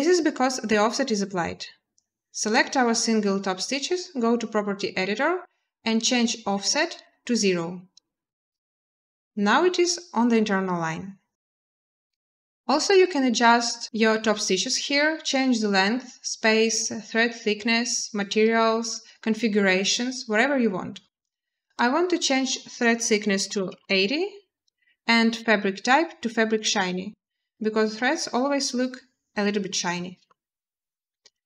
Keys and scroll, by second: 23.2 typing, 23.6 Return, 28.6 typing.